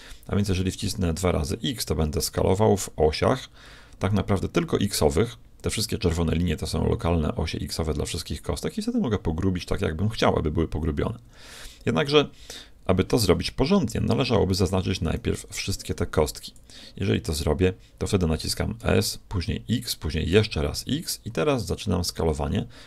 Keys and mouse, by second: 14.1 a, 15.4 b, 18.8 s.